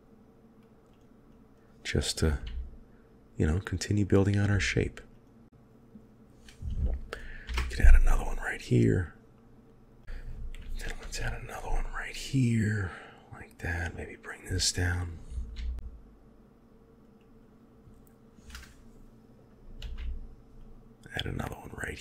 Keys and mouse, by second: 1.3 click, 2.3 g, 4.3 click, 7.0 ctrl+g, 7.3 ctrl+r, 10.9 ctrl+r, 14.1 click, 15.5 g, 19.7 ctrl+r.